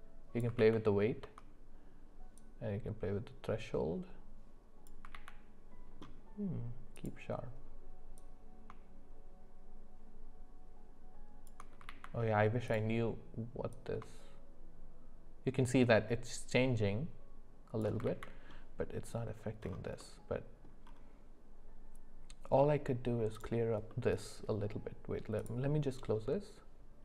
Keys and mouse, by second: 0.7 ctrl+z, 2.6-5.0 drag, 5.2 ctrl+z, 7.1-8.1 drag, 8.2-11.5 drag, 12.0 ctrl+z, 12.8 click, 14.0-17.8 shift+drag, 18.2 ctrl+z, 20.0 middle click, 22.6 middle click, 23.9 middle click.